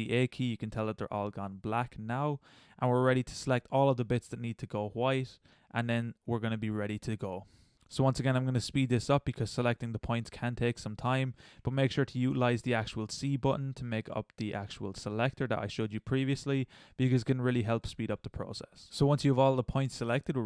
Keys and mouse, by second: 0.0 a, 2.5 middle click, 5.9 middle click, 6.3 c, 7.2 middle click, 8.3 c, 8.6 click, 8.9 middle click, 9.0 click, 9.5 middle click, 9.9 middle click, 10.8 c, 11.1 middle click, 11.2 c, 12.1 middle click, 13.2 c, 13.4 middle click, 13.8 click, 14.3 middle click, 14.6 middle click, 14.8 c, 15.4 middle click, 15.5 c, 15.9 middle click, 16.3 c, 17.1 c, 18.0 middle click.